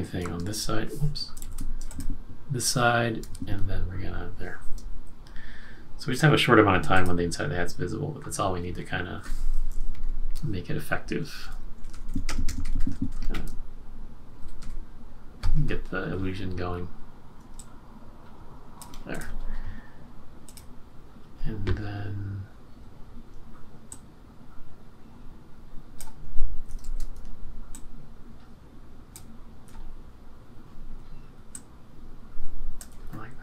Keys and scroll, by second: 0.2 BackSpace, 1.4 super+z, 3.3 F6, 3.4 F7, 10.0 shift+Up, 11.5 Up, 11.7 Up, 11.8 Up, 12.0 Up, 12.2 Up, 12.4 Up, 12.5-13.3 Up, 12.8 Up, 13.0 Up, 13.2 Up, 14.5 Down, 14.5 Down, 26.8 super+z.